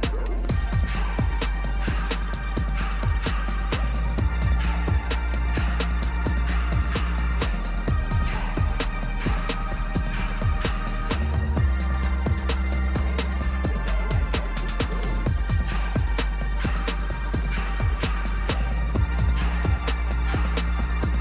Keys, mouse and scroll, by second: 0.0-1.1 typing, 1.4 click, 2.1 click, 3.1 click, 3.4-4.1 typing, 4.5 Tab, 7.5-8.8 typing, 10.7-12.8 typing, 10.8 click, 14.1 click, 14.3 click, 16.0 click, 18.0 click, 19.2 click, 20.4-21.2 typing.